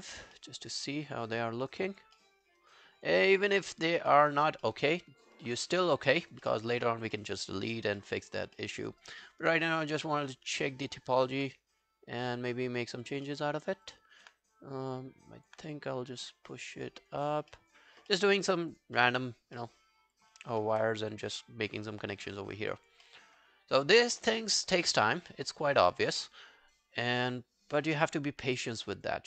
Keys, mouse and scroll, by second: 0.4 alt+middle click, 0.7 alt+right click, 1.1 alt+scroll down 3, 1.4 alt+middle click, 1.6 alt+right click, 1.8 alt+click, 2.2 alt+middle click, 2.5 alt+right click, 2.8 alt+click, 3.3 alt+middle click, 3.5 alt+right click, 3.7 alt+click, 4.1 alt+middle click, 4.3 alt+right click, 4.7 alt+middle click, 6.1 alt+scroll down 1, 6.5 alt+middle click, 7.2 alt+middle click, 7.5 alt+scroll down 4, 8.0 alt+middle click, 8.3 alt+scroll up 3, 8.6 alt+middle click, 8.9 alt+right click, 9.2 alt+click, 11.2 alt+click, 13.3 alt+middle click, 13.9 alt+click, 15.3 alt+click, 17.3 scroll down 2, 17.5 alt+middle click, 18.1 alt+middle click, 18.4 alt+scroll up 2, 18.7 alt+click, 19.0 alt+middle click, 19.3 alt+scroll down 1, 19.6 alt+middle click, 19.9 alt+scroll up 2, 20.2 alt+click, 20.6 alt+middle click, 20.9 alt+scroll down 1, 21.2 alt+click, 21.9 alt+scroll up 2, 22.2 alt+middle click, 22.5 alt+scroll up 1, 22.7 alt+click, 23.1 alt+middle click, 23.3-23.6 alt+scroll up 2, 23.6 alt+scroll down 1, 23.9 alt+click, 24.4 alt+middle click, 25.1 alt+scroll down 1, 25.3 alt+middle click, 25.6 alt+right click, 25.8 alt+click, 26.1 w, 27.0 right click.